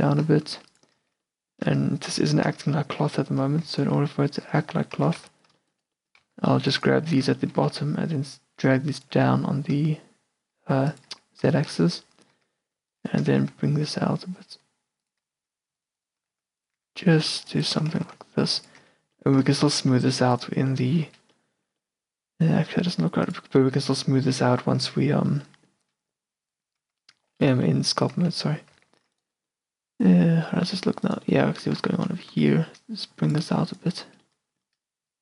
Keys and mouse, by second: 0.2 g, 1.1 Tab, 1.4 middle click, 1.7 q, 1.9 middle click, 2.7 Tab, 3.1-4.7 middle drag, 4.7-7.7 typing, 9.2 g, 11.2 Tab, 12.4 Tab, 13.4 g, 15.4 a, 16.3 g, 16.9 a, 17.2 click, 18.1 g, 18.9 Tab, 19.3 click, 19.5 a, 19.9 q, 20.7-21.2 middle drag, 21.2 Tab, 22.0 middle click, 22.7-24.0 middle drag, 26.9 Tab, 27.4 middle click, 27.6 a, 28.3 z, 29.0 z, 29.7-31.7 middle drag, 31.9 z, 32.0-35.2 middle drag, 32.5 z, 33.5 a.